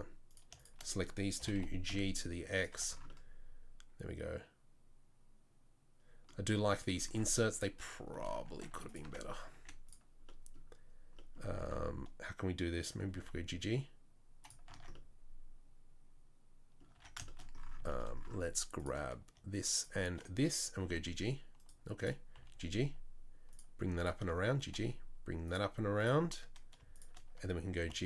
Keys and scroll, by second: 1.4 g, 2.7 Tab, 7.8 Tab, 8.7 Tab, 9.0 Tab, 9.5 1, 13.0 g, 14.8 Tab, 17.0 Tab, 20.8 g, 22.3 g, 24.4 g, 27.8 g.